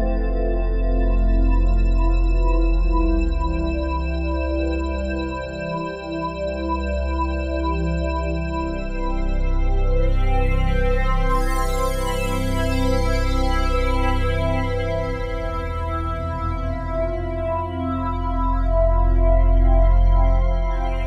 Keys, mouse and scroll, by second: 0.0 click, 3.3 super+d, 4.3 click, 5.1-6.2 drag, 9.5-10.6 drag, 11.7 click, 12.8-16.1 alt+shift+drag, 18.2 click.